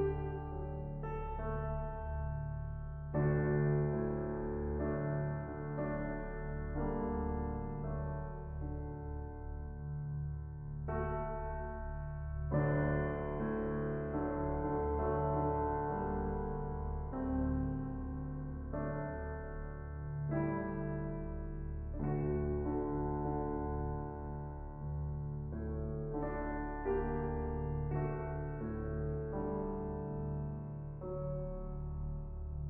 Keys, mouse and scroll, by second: 0.1-0.9 shift+middle drag, 0.9 t, 1.4 click, 3.4-3.8 scroll up 5, 3.8-4.8 shift+middle drag, 4.8 scroll down 2, 5.3 s, 9.2-10.3 drag, 10.3-10.9 middle drag, 10.9 scroll up 2, 11.2 middle click, 11.5 scroll up 1, 11.9 middle click, 12.3 click, 12.4 scroll down 3, 12.5-13.2 middle drag, 13.2-14.0 scroll down 1, 14.0 n, 14.4 n, 14.6-15.4 scroll up 1, 15.4-15.7 drag, 15.9-16.6 drag, 16.6 shift+a, 18.4-19.2 drag, 19.2 shift+a, 20.9-21.7 drag, 22.3-23.0 drag, 24.4 scroll down 10, 25.4-26.1 drag, 26.1-26.5 middle drag, 26.5-28.4 scroll up 9, 28.4-29.4 drag, 29.6-30.7 shift+drag, 31.3 middle click, 31.3 ctrl+z, 31.5-32.0 scroll down 19, 31.6 middle click, 32.0-32.6 middle drag.